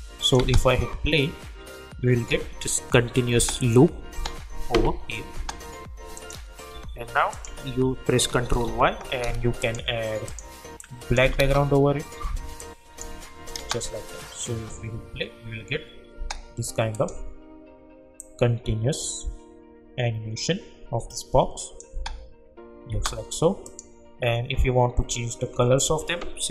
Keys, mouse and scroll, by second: 0.4 space, 3.3 space, 6.1 click, 6.7 u, 7.3 click, 8.5 ctrl+y, 9.6 click, 11.2 Return, 12.6 click, 13.6 space, 16.1 space, 16.9-21.9 drag, 21.9 space, 23.6 click.